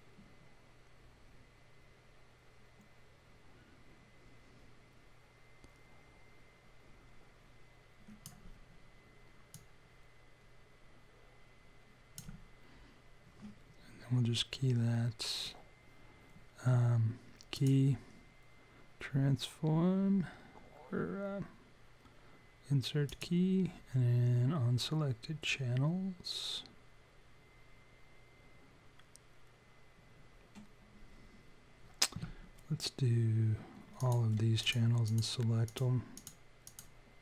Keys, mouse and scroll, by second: 9.5 click, 17.5 click, 34.0 click, 34.6-37.0 shift+click.